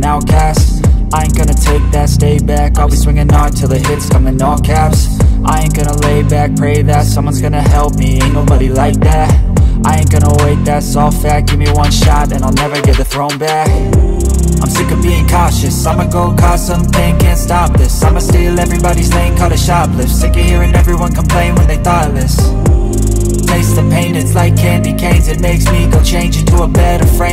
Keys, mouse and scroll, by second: 6.4-7.3 scroll down 1, 14.1 c, 17.8 scroll down 1, 21.6-22.1 scroll down 1, 22.1 right click, 24.0-24.5 scroll up 1, 24.5 double click, 25.6-26.1 scroll down 1, 26.4 shift+click, 26.7-27.3 scroll down 1.